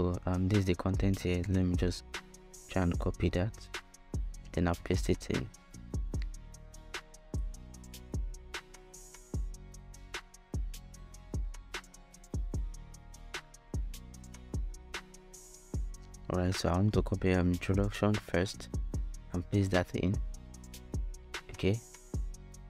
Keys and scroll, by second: 2.4 shift+Return, 2.8 super+v, 16.1 super+c, 17.7 super+v.